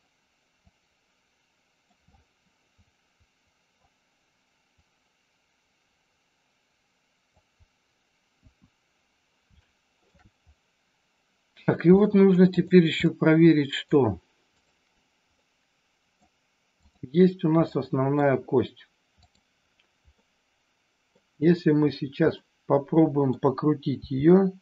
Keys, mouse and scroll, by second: 0.6-1.9 drag, 2.1-3.8 middle drag, 4.8-7.2 drag, 8.2 KP_1, 9.6 shift+middle click, 11.9 middle click, 12.5 click, 13.0 middle click, 15.4 middle click, 17.6 middle click, 19.1 click, 20.1-21.1 middle drag, 22.4 middle click, 24.0 r.